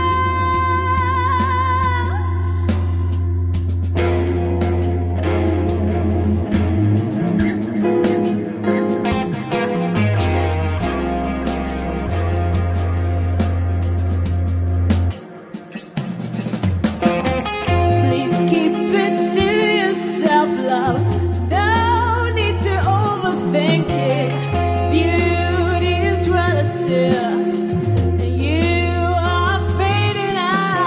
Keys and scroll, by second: 3.9 shift+Return, 4.4 Return.